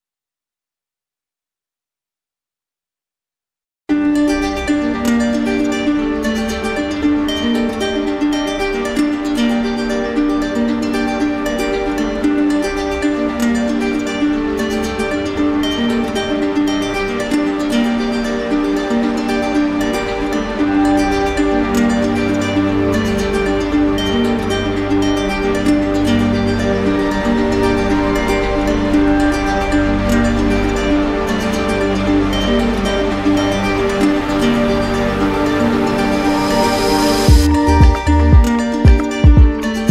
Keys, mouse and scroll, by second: 0.3 alt+click, 0.5 click, 1.1 alt+click, 1.1 alt+click, 1.3 ctrl+click, 1.4 ctrl+click, 1.8 ctrl+click, 1.9 alt+click, 2.3 alt+click, 2.6 alt+click, 2.8 alt+click, 3.0 alt+click, 3.1 alt+click, 3.4 ctrl+click, 3.5 ctrl+click, 3.6 click, 3.8 ctrl+click, 4.0 alt+click, 4.0 alt+click, 4.6 alt+click, 4.9 alt+click, 5.0 alt+click, 5.3 alt+click, 5.3 ctrl+click, 5.6 ctrl+z, 5.6 ctrl+click, 5.9 ctrl+click, 6.0 alt+click, 6.1 alt+click, 6.5 alt+click, 6.7 alt+click, 6.9 click, 7.0 alt+click, 7.2 ctrl+click, 7.4 ctrl+click, 7.6 ctrl+click, 7.7 alt+click, 7.8 alt+click, 8.2 alt+click, 8.4 alt+click, 8.5 alt+click, 8.6 click, 8.7 alt+click, 8.9 alt+click, 9.1 click, 9.2 ctrl+click, 9.3 alt+click, 9.5 alt+click, 9.5 alt+click, 9.9 click, 9.9 alt+click, 10.1 ctrl+click, 10.2 alt+q, 10.4 click, 10.5 alt+click, 14.5 click, 15.3 click, 18.5 click, 19.7 click, 21.4 click, 22.0 shift+click, 23.9 alt+click, 25.1 click, 25.6 alt+click, 28.9 click, 30.5 click, 31.2 alt+click, 31.4 alt+click, 32.5 w, 35.0 ctrl+click, 36.4 ctrl+click, 38.0 alt+click, 38.9 alt+click.